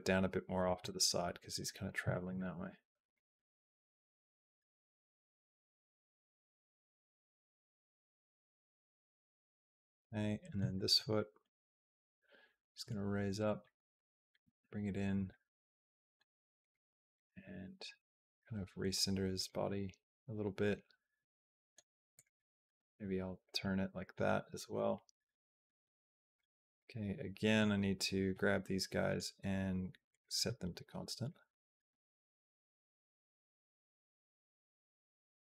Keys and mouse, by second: 0.7 middle click, 1.5 middle click, 2.1 middle click, 3.0-8.8 drag, 9.2 click, 9.6-10.7 middle drag, 11.0 middle click, 12.6 g, 13.5 middle click, 14.2 g, 15.1 middle click, 16.4 click, 16.8 middle click, 17.2 g, 19.4-21.5 middle drag, 22.4 middle click, 22.6 r, 23.5 middle click, 24.6-26.2 drag, 26.5 b, 28.9-30.0 right drag, 31.1-35.5 drag.